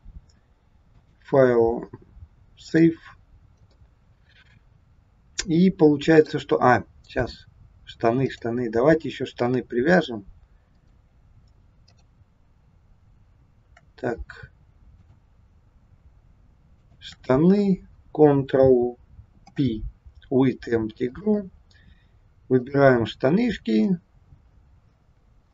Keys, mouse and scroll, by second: 0.8 click, 3.7 middle click, 8.2 click, 9.8 click, 11.8 click, 15.0 click, 16.8 shift+click, 19.3 ctrl+p, 22.6 click.